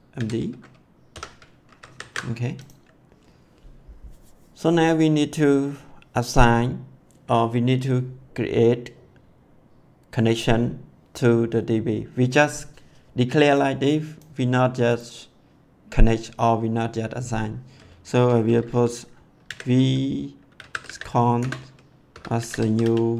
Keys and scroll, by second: 0.0-1.1 typing, 1.6 ctrl+s, 19.4-23.1 typing, 21.4 Return.